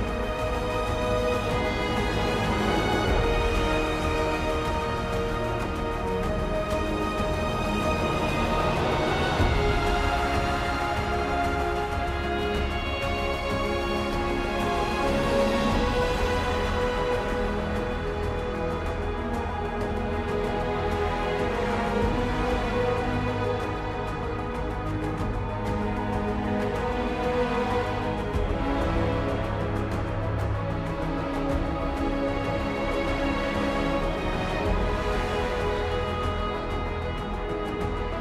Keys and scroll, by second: 7.1 ctrl+c, 7.3 ctrl+v, 7.8 ctrl+t, 12.3 ctrl+j, 12.9 ctrl+t, 32.8 ctrl+z, 35.7 ctrl+e, 36.5 ctrl+z.